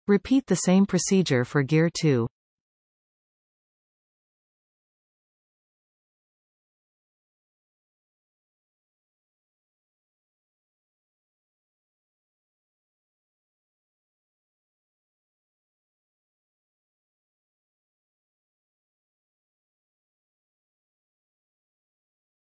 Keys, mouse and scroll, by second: 2.1-3.8 scroll up 2, 3.8 click, 4.7 Tab, 5.7-6.9 middle drag, 6.9 f, 7.4-8.6 shift+middle drag, 8.6 i, 11.2 x, 13.9 alt+shift+click, 14.6 x, 16.0-17.0 middle drag, 17.0 Tab, 17.7 shift+click, 19.4 ctrl+j, 19.9 Tab, 20.5 shift+middle click, 21.0-21.6 scroll up 2, 22.0 alt+a.